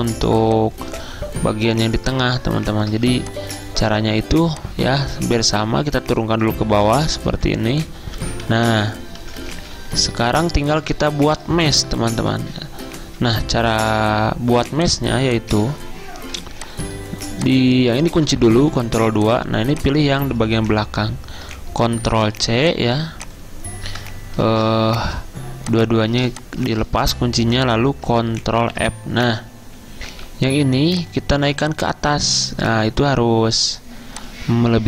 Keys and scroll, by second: 6.8 ctrl+[, 7.0 ctrl+[, 7.1 ctrl+[, 18.8 ctrl+2, 20.7 ctrl+z, 22.2 ctrl+c, 24.5 ctrl+alt+2, 28.7 ctrl+f, 31.1 a.